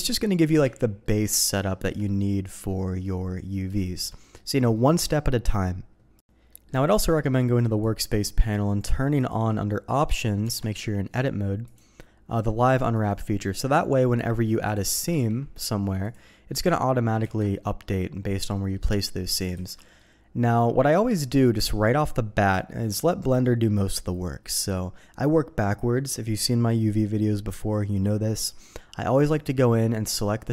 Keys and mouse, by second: 0.6 z, 1.1 click, 1.7 shift+drag, 2.5 middle click, 3.8 shift+middle click, 4.2 middle click, 6.5 middle click, 7.8 click, 9.0 click, 9.2 click, 10.4 Tab, 11.1 middle click, 11.6 click, 12.9 click, 14.6 click, 15.1 ctrl+e, 17.3 ctrl+z, 17.6 click, 18.5 click, 19.5 alt+a, 19.7 click, 20.5 click, 29.1-30.5 drag.